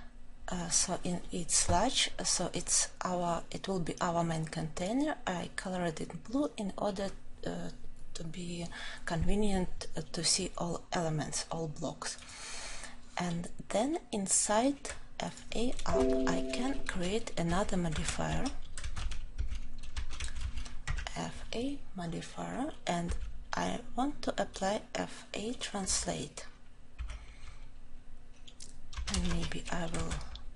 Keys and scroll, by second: 22.9 Return.